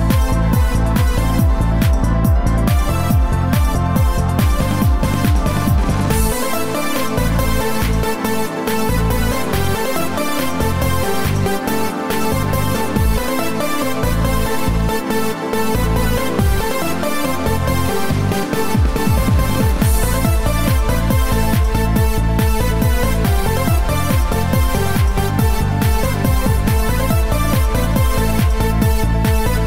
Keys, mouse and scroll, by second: 6.1 click, 6.9 click, 9.8-10.8 scroll up 4, 11.0-11.4 scroll down 1, 22.3 click, 23.6 click.